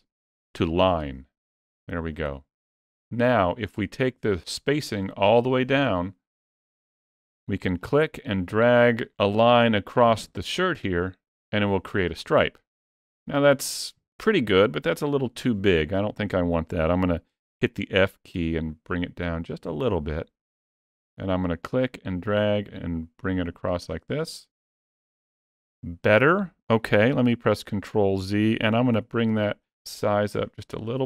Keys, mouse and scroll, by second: 7.6 click, 15.0 ctrl+z, 17.4 f, 21.5 click, 27.3 ctrl+z, 28.7 f.